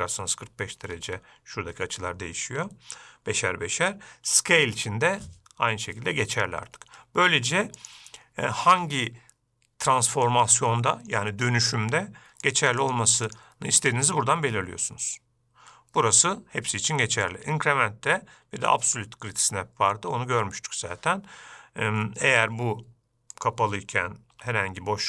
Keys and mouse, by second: 8.3-19.8 drag, 23.7 click, 24.7 g.